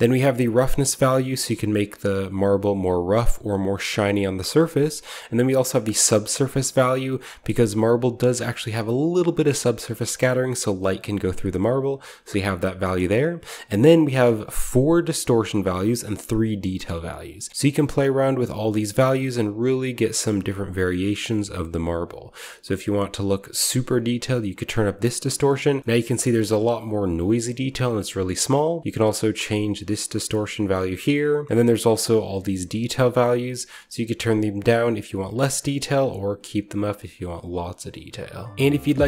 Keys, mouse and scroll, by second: 0.0-3.9 ctrl+shift+drag, 4.1-5.2 middle drag, 7.0 click, 10.0-11.5 drag, 17.2 click, 17.5-18.5 middle drag, 19.2-20.6 drag, 20.9-24.8 drag, 25.8-28.4 shift+scroll up 1, 28.4-30.2 drag, 31.9-33.4 drag, 33.5-35.0 scroll down 1, 35.0-38.6 drag, 35.0-35.3 scroll down 1, 38.6 ctrl+alt+Left.